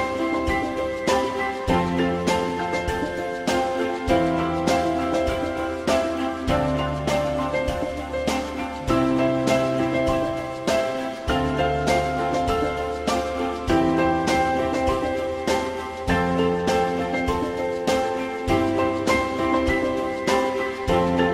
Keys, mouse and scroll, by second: 14.1 alt+middle click.